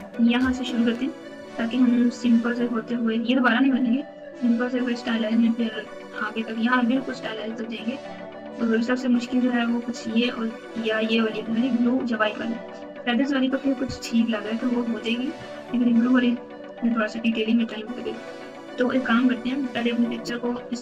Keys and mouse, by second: 20.4 g.